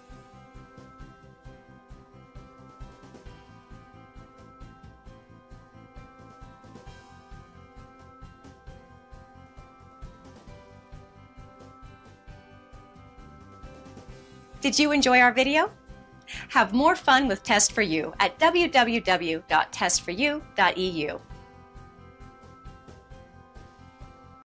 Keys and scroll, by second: 13.4 Return, 24.3 typing.